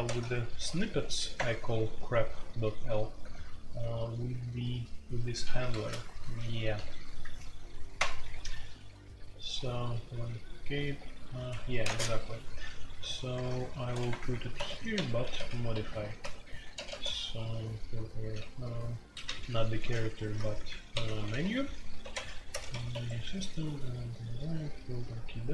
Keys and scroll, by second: 0.0-25.5 typing, 11.5 Escape, 11.8 Tab, 14.1 Return, 14.2 Return, 18.9 Escape.